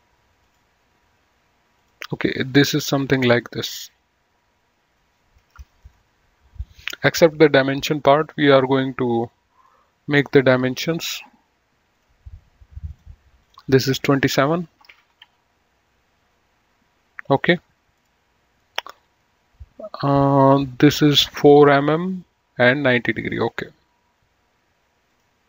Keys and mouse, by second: 1.8 click, 2.4 right click, 3.0 click, 9.8 click, 12.1 click, 15.1 KP_2, 15.3 KP_7, 15.4 KP_Enter, 18.3 click, 23.6 click, 25.2 click.